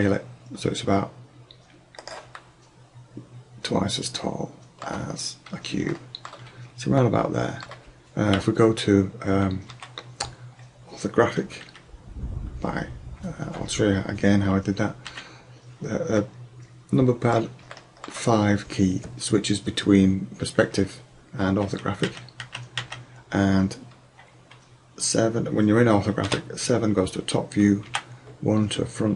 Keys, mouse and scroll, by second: 2.2-2.6 drag, 2.7 click, 3.0 drag, 3.8 middle click, 4.3 middle click, 6.2 middle click, 9.8 KP_1, 11.7 KP_5, 15.1 KP_5, 16.2-17.2 middle drag, 20.7-22.8 typing, 26.4 KP_7, 27.9 KP_1.